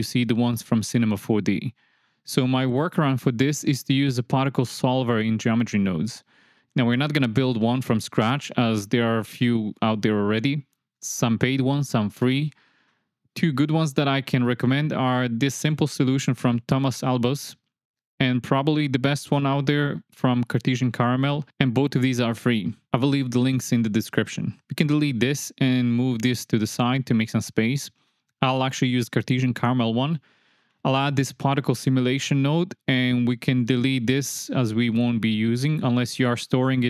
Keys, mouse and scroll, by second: 0.9 space, 2.1-2.4 shift+drag, 2.7 space, 4.1 space, 6.0 shift+click, 6.4-7.0 drag, 8.4 space, 12.4 space, 14.5 KP_0, 18.1 space, 21.5 click, 21.7-23.0 drag, 24.8 click, 25.1 click, 25.3 ctrl+x, 25.4 click, 25.7 ctrl+x, 26.0 click, 27.2 click, 27.8 click, 28.1 m, 31.0 shift+a, 33.0 click, 34.2 click, 34.9 ctrl+x.